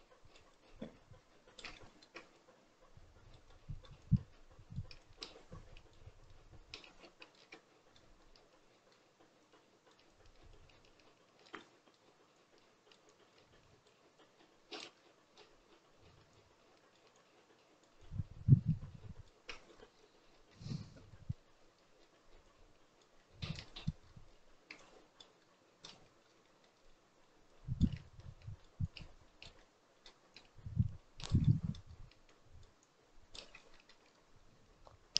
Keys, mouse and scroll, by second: 1.7 shift+middle click, 2.3-3.4 drag, 3.4 middle click, 3.9-7.4 drag, 7.4-9.3 middle drag, 9.3-11.5 drag, 11.5 middle click, 12.2-14.9 drag, 14.9-16.2 middle drag, 16.2-19.3 drag, 19.3-20.2 scroll down 10, 20.2 shift+middle click, 20.6-21.0 scroll up 6, 21.0 middle click, 21.5 scroll up 1, 21.7 shift+middle click, 22.3 click, 23.1 middle click, 23.9-24.7 scroll up 6, 24.7 click, 25.3 middle click, 25.9-26.3 scroll down 6, 26.3 shift+middle click, 26.7-27.3 scroll up 2, 27.3-29.5 drag, 29.5 middle click, 30.2-31.3 shift+drag, 31.3 middle click, 31.8-32.1 scroll up 1, 32.1-33.3 shift+drag, 33.3-33.7 scroll down 2, 33.7 shift+middle click, 33.9-35.1 scroll up 5.